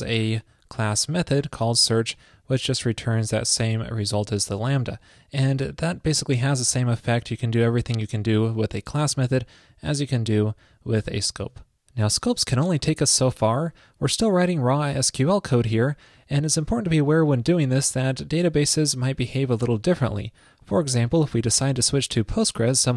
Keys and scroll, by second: 11.5 super+s.